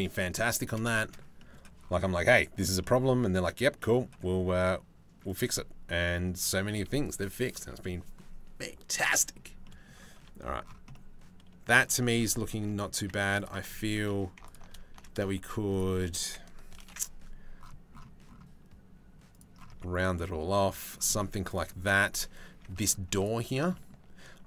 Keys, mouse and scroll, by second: 0.5 middle click, 1.0 middle click, 1.7 middle click, 2.4 shift+middle click, 2.6 middle click, 3.4 middle click, 4.0 s, 5.4 middle click, 6.3 Tab, 7.1 Tab, 8.6 middle click, 9.2 middle click, 9.8 Tab, 10.5 middle click, 11.6 shift+middle click, 12.2 click, 13.0 click, 13.7 2, 14.1 alt+click, 15.3 alt+shift+click, 16.4 ctrl+b, 19.3 Tab, 19.6 middle click, 19.8 middle click, 21.1 middle click, 22.1 Tab, 22.3 click, 22.8 alt+click, 23.3 shift+click, 24.3 middle click.